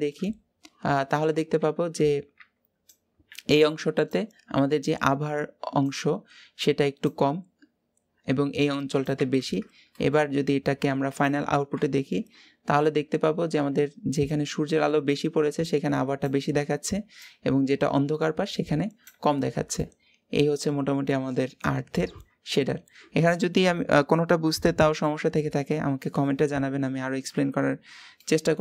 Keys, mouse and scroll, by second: 11.0 ctrl+shift+click, 19.2 scroll down 3, 19.5-22.0 middle drag, 22.0-22.7 scroll down 4, 27.6 scroll up 5, 28.0-28.6 middle drag.